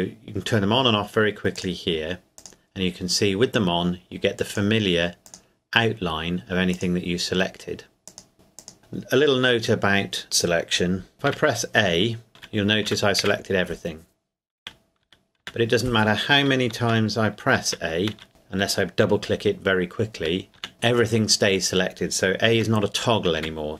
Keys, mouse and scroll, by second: 11.2 a, 12.9 a, 13.2 a, 14.6 a, 15.0 a, 15.4 a, 16.7 a, 17.6 a, 18.1 a, 20.5 typing, 23.4 typing.